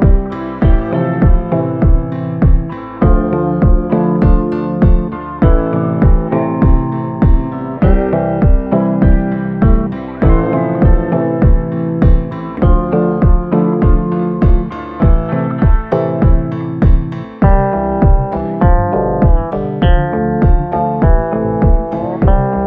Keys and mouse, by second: 0.0 click, 2.0-3.9 middle drag, 5.0 shift+middle click, 6.9 click, 8.3 ctrl+i, 8.9 b, 9.0 click, 10.3-15.0 typing, 14.7 middle click, 16.1 b, 16.8 b, 17.8 middle click, 18.1 shift+middle click, 18.5 b, 19.3 b, 20.3 b, 21.5 middle click, 22.0 b.